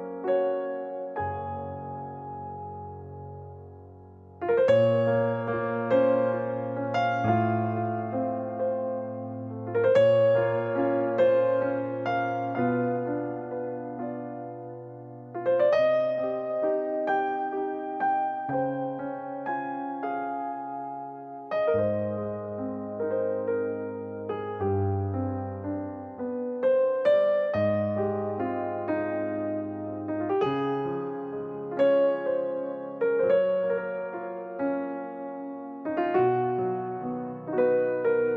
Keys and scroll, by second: 1.0 ctrl+s, 17.2 e, 23.5 space, 32.7 m, 35.7 space, 35.8 Escape, 36.0 Escape, 36.1 Escape, 36.2 Escape.